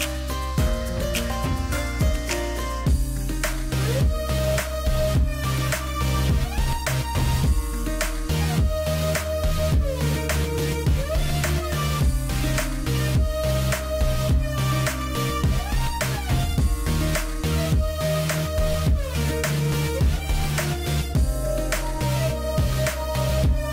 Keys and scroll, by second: 0.9 space, 4.1 space, 9.6 space, 13.6 space, 19.2 space.